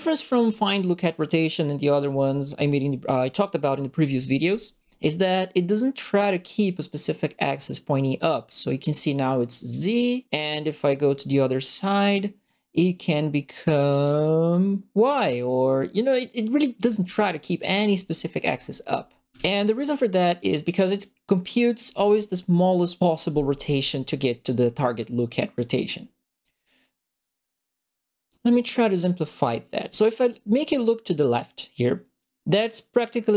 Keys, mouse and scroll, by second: 6.3-9.6 drag, 10.2-16.7 drag, 17.1-19.5 right drag, 18.3 d, 19.3 w, 21.0-29.8 right drag.